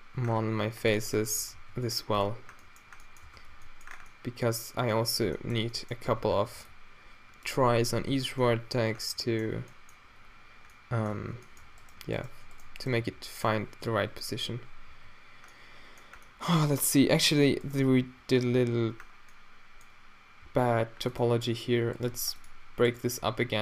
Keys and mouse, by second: 0.3 c, 1.7 g, 3.3 Tab, 3.3 z, 3.5 z, 4.2 middle drag, 6.1 Tab, 6.4 a, 6.6 b, 7.6 q, 8.2 Tab, 11.2 Tab, 13.1-14.0 drag, 13.1 f, 14.0 z, 14.9 f, 18.1 x, 20.5 x, 22.2 x, 23.2 g.